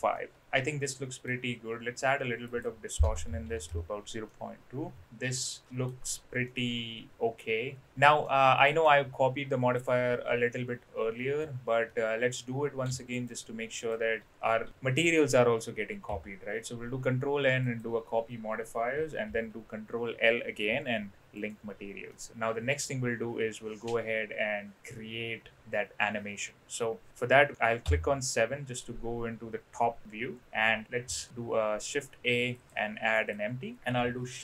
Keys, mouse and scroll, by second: 0.1-1.3 middle drag, 2.5-3.9 drag, 4.3-5.9 middle drag, 6.4-7.8 middle drag, 8.2-8.8 middle drag, 11.9-12.3 middle drag, 13.2 shift+click, 13.8 shift+click, 16.1 ctrl+l, 19.2 ctrl+l, 22.1 middle click, 27.8 KP_7, 31.1 shift+a.